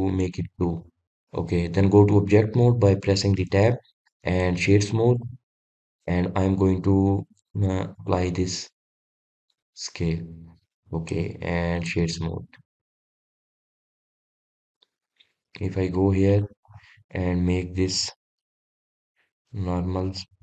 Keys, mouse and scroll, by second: 0.8-4.0 drag, 4.0 Tab, 4.9-8.2 right drag, 8.2-11.4 drag, 11.7-13.1 right drag, 13.1-16.1 middle drag, 16.9 click, 17.3-17.8 scroll down 1, 18.5-19.0 scroll down 9, 19.6-20.4 drag.